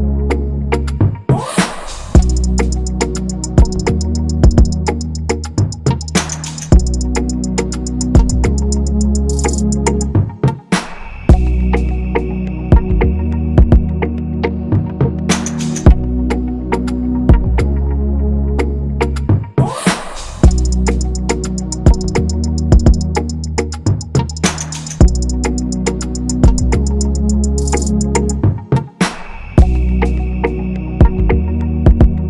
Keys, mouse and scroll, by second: 1.4 ctrl+z, 8.4 typing, 16.0-16.7 typing, 21.5 double click.